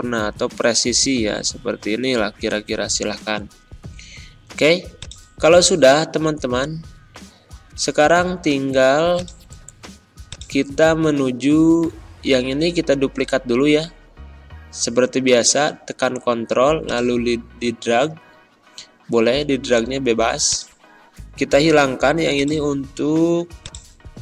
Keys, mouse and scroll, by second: 19.4 click.